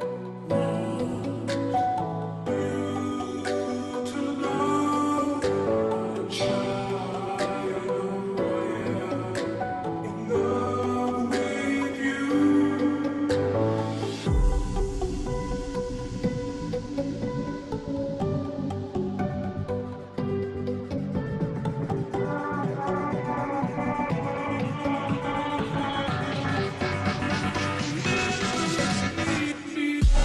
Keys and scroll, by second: 0.1-1.8 typing, 1.8 Return, 4.6 ctrl+j.